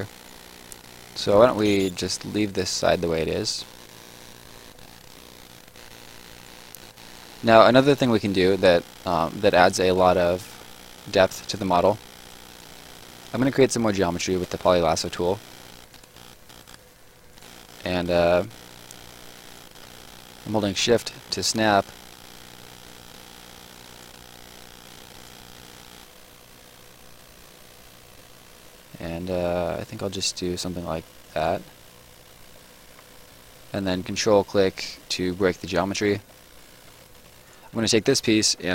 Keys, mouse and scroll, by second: 0.6 shift+right click, 1.4 space, 2.3 right click, 4.3 middle click, 4.6 right click, 6.6 middle click, 12.4 click, 15.4 Escape, 15.8 click, 19.4 click, 19.8 shift+click, 23.9 shift+click, 26.3 shift+click, 29.9 shift+click, 30.5 shift+click, 32.6 click, 33.0 ctrl+click, 35.6 ctrl+click, 36.8 Escape, 37.4 click.